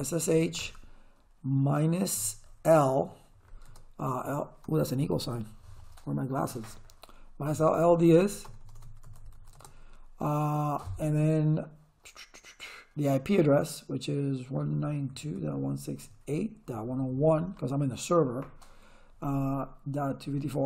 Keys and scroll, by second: 0.3 h, 0.4 space, 2.1-4.6 typing, 6.5-9.9 typing, 14.5-17.9 typing, 20.0-20.6 typing.